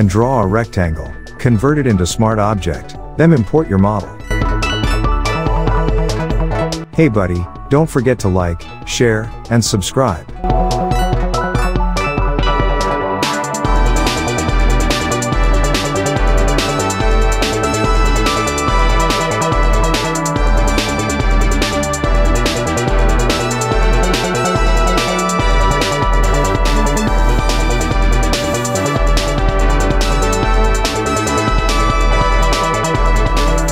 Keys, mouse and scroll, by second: 8.1-8.8 shift+click, 9.2-9.7 shift+click, 14.2 click, 15.2 alt+Tab, 15.8 click, 16.5-17.2 alt+Tab, 19.8 click, 20.9 ctrl+t, 21.9-23.3 drag, 26.3 ctrl+s, 26.8 ctrl+F4, 27.8 ctrl+t, 28.7-30.1 drag, 31.5 alt+scroll down 1, 32.0 alt+scroll up 1, 32.5-33.0 shift+click.